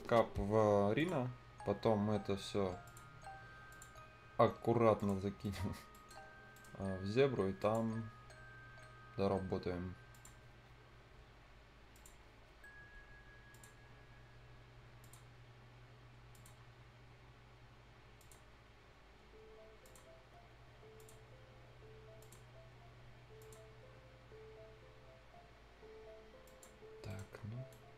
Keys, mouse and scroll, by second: 0.9 click, 1.2 scroll down 1, 1.3-2.8 scroll up 1, 2.8 click, 3.1-3.7 scroll up 1, 3.7 click, 3.7 click, 3.9-4.4 scroll down 1, 4.4-4.9 scroll up 1, 4.9 click, 5.2-5.8 scroll down 2, 5.4 right click, 5.9 right click, 6.2-6.5 scroll up 1, 6.5 right click, 6.7 scroll up 1, 7.5 click, 7.9 scroll down 1, 8.3 scroll up 1, 9.0 scroll down 1, 9.2-10.1 scroll up 1, 10.1 click, 10.3 scroll down 1, 11.2-11.9 scroll up 1, 11.9 click, 11.9 click, 12.2 scroll down 1, 13.5 click, 13.8 scroll down 1, 15.0 click, 15.3 scroll down 1, 15.4 scroll up 1, 16.3 click, 16.6-17.0 scroll down 1, 17.0 scroll up 1, 18.2 click, 18.4 scroll down 1, 18.7-19.8 scroll up 1, 19.8 click, 19.8 click, 20.1 scroll down 1, 20.2-20.5 scroll up 1, 21.0 click, 23.7-25.7 scroll up 1, 26.4 click, 26.7 scroll down 1, 27.1 right click, 27.3 scroll down 1, 27.7 right click.